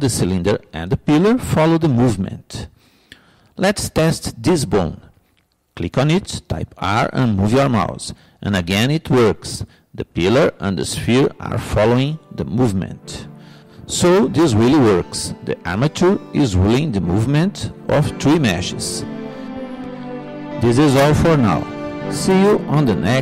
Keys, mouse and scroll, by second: 4.9-6.7 drag, 6.5 r, 6.8 click.